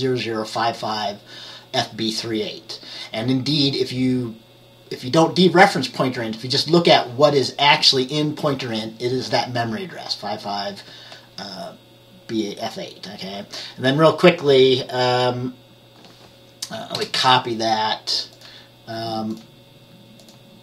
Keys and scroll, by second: 17.0 Return.